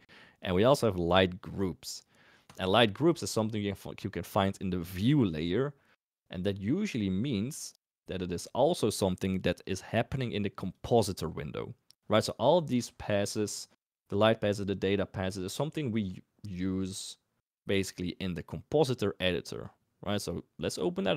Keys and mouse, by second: 10.7 click, 19.3 click, 20.1-21.1 drag.